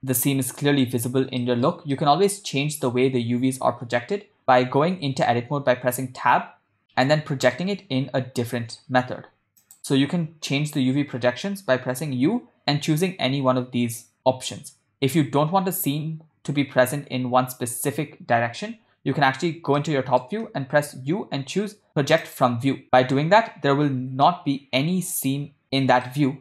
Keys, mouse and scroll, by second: 1.5 middle click, 2.1-2.5 ctrl+middle drag, 7.1 Tab, 7.4 ctrl+middle click, 10.2 Tab, 10.2 click, 12.1 u, 19.4 KP_7, 19.8 ctrl+middle click, 21.1 u, 24.1 Tab, 24.4-25.6 ctrl+middle drag.